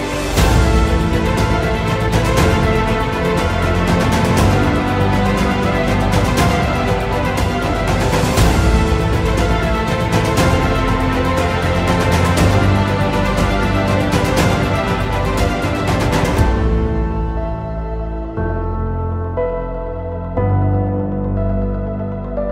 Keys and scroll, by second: 3.7 shift+F2, 4.5 alt+t, 4.7 u, 5.4 Up, 5.7 Return, 6.9 alt+t, 7.1 u, 7.7 Down, 8.1 Return, 8.6 F3, 9.6 c, 9.7 e, 10.1 Escape, 20.8 ctrl+space, 21.3 F4, 21.9 Escape.